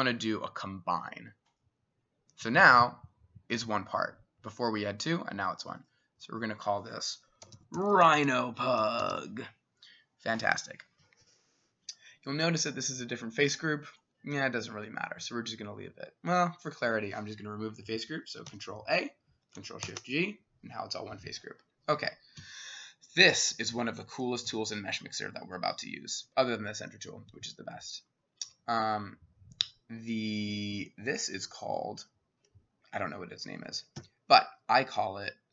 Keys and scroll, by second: 7.2-9.6 typing, 18.5 ctrl+a, 19.9 ctrl+shift+g, 22.4 s, 24.5 c, 31.5-35.5 [, 34.0 w.